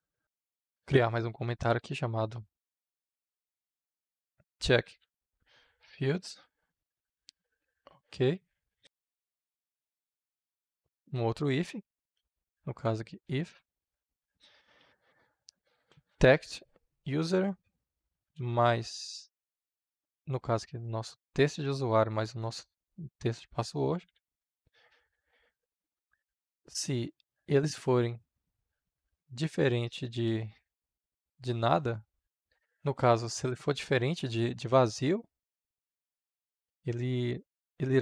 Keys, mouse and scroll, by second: 0.1 Return, 0.3-6.2 typing, 7.1 Up, 8.3-11.0 drag, 11.0 i, 11.3 f, 12.1 Return, 12.5-16.5 typing, 16.8 Return, 18.1 space, 21.2-23.6 drag, 23.6-24.9 typing, 25.1 Down, 25.4 Return, 26.3 space, 27.6 shift+1, 30.0 space, 31.1 ~, 31.9 Right, 32.6-38.0 drag.